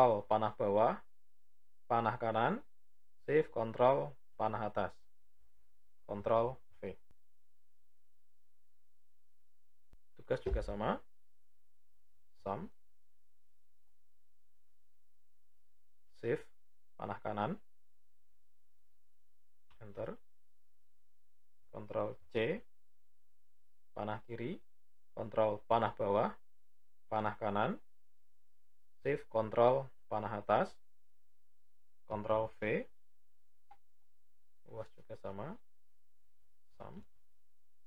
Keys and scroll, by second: 1.7 Right, 2.9 ctrl+shift+Up, 6.0 ctrl+v, 16.1 typing, 21.6 ctrl+c, 23.8 Left, 24.9 ctrl+Down, 27.1 Right, 28.7 ctrl+shift+Up, 31.8 ctrl+v, 36.6 typing.